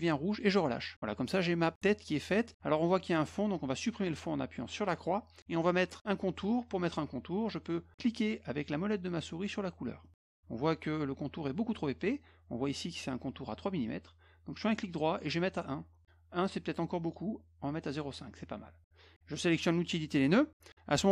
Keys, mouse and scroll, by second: 4.8 click, 10.0 middle click, 14.7 right click, 17.1 right click, 17.9 click, 19.8 click.